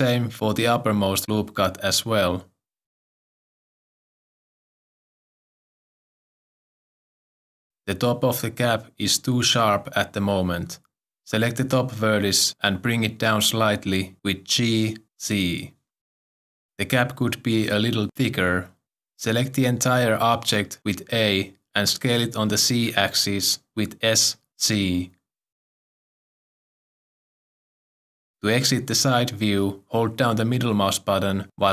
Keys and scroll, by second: 4.7 s, 14.7 g, 14.8 z, 21.1 a, 23.8 s, 24.5 z.